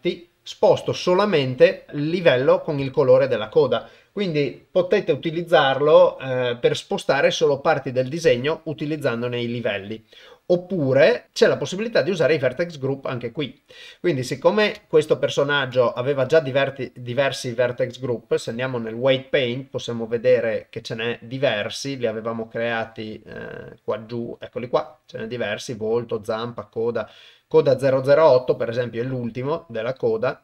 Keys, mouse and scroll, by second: 0.7 g, 12.4 click, 15.1 ctrl+Tab, 22.4 middle click, 23.5 middle click, 25.1-26.5 drag.